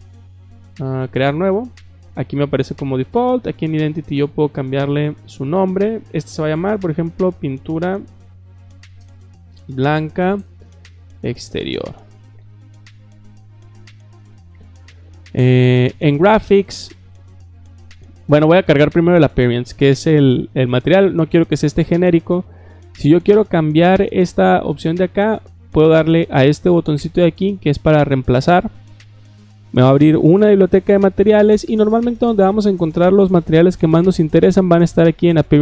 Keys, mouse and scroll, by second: 1.0 click, 3.0 click, 3.7 click, 6.4-12.7 typing, 15.9 click, 18.3 click, 28.5 click.